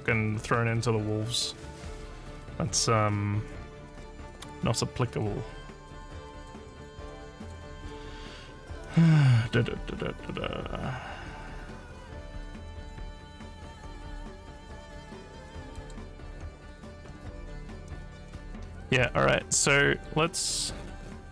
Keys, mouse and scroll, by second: 6.5 click, 9.0 click, 15.8 click, 20.5 click.